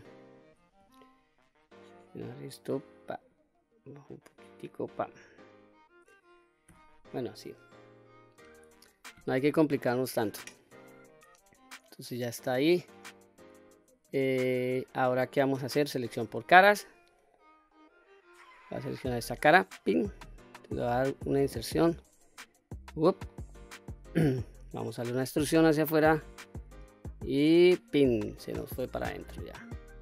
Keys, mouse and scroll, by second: 0.6 q, 1.3-2.3 drag, 3.1-4.5 drag, 4.9 click, 6.5 q, 7.1 scroll down 1, 7.4-8.7 middle drag, 9.7 middle click, 10.9-11.3 scroll up 2, 11.3-12.6 middle drag, 13.0-14.6 scroll down 2, 14.8 middle click, 15.5-15.9 scroll up 1, 16.1 3, 16.6-17.1 scroll up 2, 17.1-18.3 middle drag, 19.4 click, 20.4 middle click, 21.7 i, 22.9 click, 23.3 middle click, 24.9 e, 27.6 click, 28.1 scroll down 1, 28.4 middle click, 29.1 scroll down 2, 29.6-30.0 middle drag.